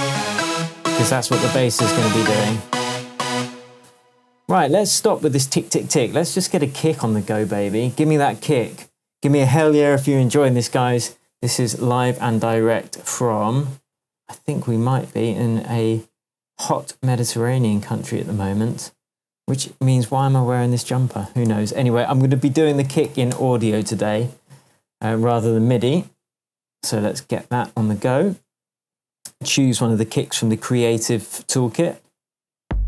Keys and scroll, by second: 3.3 space, 15.1 super+s, 20.1 super+t, 21.4 BackSpace, 22.4 super+BackSpace, 22.4 super+r, 22.6-23.4 typing.